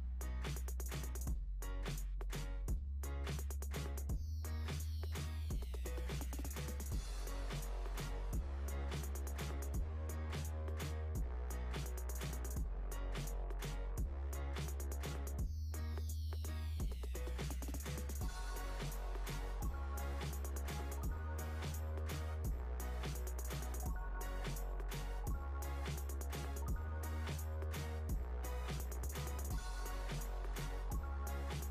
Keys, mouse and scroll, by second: 1.2 s, 6.5 click, 6.7 scroll down 1, 7.5 click, 11.8 scroll down 2, 12.8 click, 15.3 click, 17.1 click, 18.1 KP_3, 19.0 click, 19.6-20.2 scroll up 6, 20.2 shift+a, 22.6 s, 24.3-26.5 drag, 26.5 Tab, 26.8 click, 27.8 click, 28.8 b, 30.3 click.